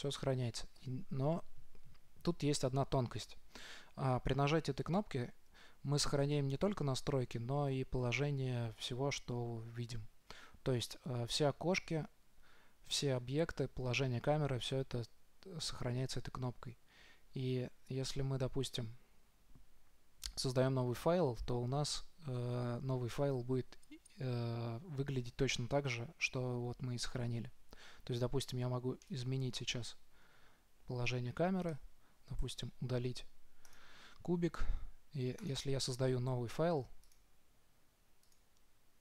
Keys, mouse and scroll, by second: 29.4-31.1 middle drag, 32.1-33.7 right drag, 32.8 Delete, 35.7-37.4 drag.